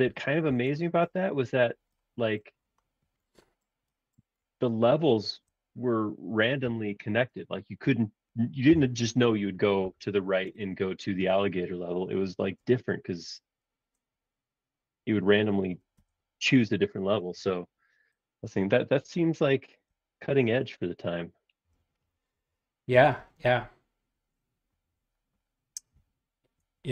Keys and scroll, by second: 0.0-1.1 typing, 6.6 c, 8.7 Left, 9.8 Right, 15.7 4, 15.9 Return, 17.2 space.